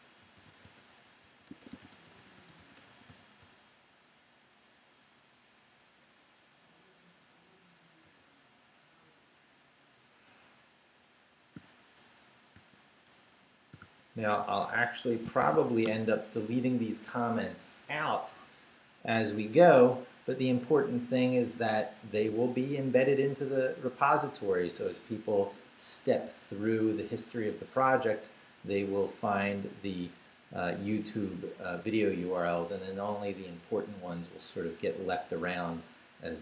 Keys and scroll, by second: 0.0-3.9 typing, 4.3 Left, 6.8 Left, 7.5 super+Left, 8.0 super+v, 10.3 Escape, 11.6 0, 12.2 Right, 12.6 space, 13.1 Left, 13.7 i, 13.8 space, 14.9 Escape, 15.4 shift+;, 15.7 shift+w, 15.8 Return.